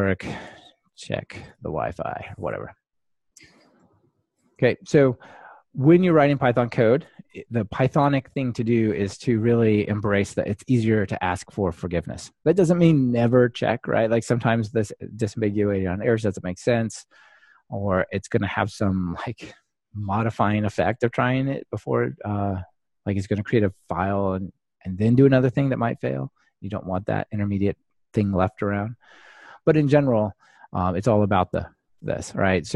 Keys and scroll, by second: 6.4 Delete, 9.1 Escape.